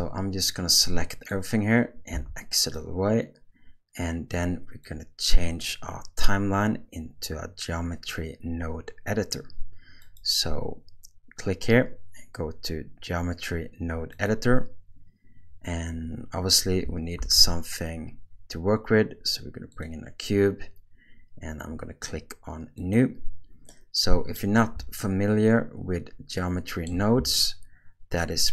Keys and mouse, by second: 0.5-2.1 drag, 2.1 x, 4.9 click, 10.1-14.3 drag, 17.2 shift+a, 23.9 middle click, 25.1-26.9 ctrl+middle drag, 27.4-28.5 shift+middle drag.